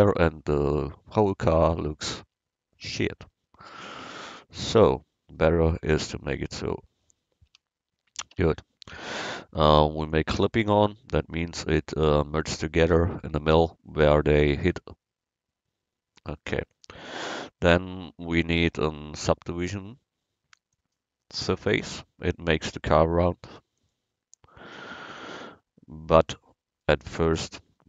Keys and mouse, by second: 2.3 Tab, 4.5-5.6 drag, 7.5 Tab, 8.4 Tab, 16.7-20.8 drag, 23.8-27.0 drag, 27.0-27.8 middle drag.